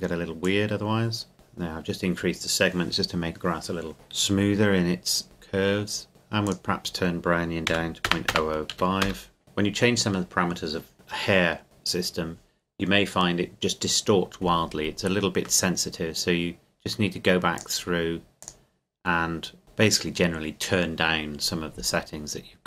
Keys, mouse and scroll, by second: 5.2 click, 6.1 KP_Enter, 6.4 click, 7.7 KP_Decimal, 8.1 KP_0, 8.7 KP_5, 9.0 KP_Enter, 14.9-15.4 scroll down 1, 15.4-16.6 scroll up 1, 17.6 click, 19.6-20.8 scroll down 1.